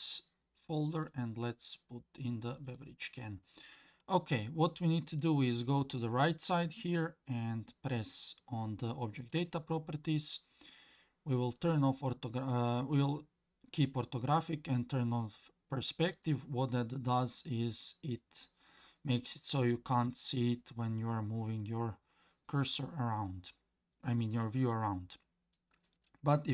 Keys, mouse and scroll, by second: 9.2 middle click, 9.2 click, 16.1 middle click, 16.1 click, 17.2-25.5 middle drag.